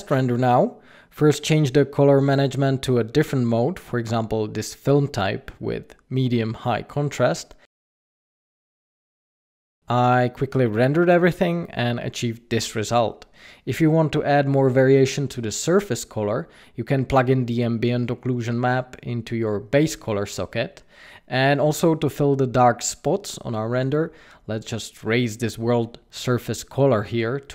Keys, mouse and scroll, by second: 1.0 click, 1.9 click, 6.3 click, 11.4 scroll down 5, 14.9 scroll down 2.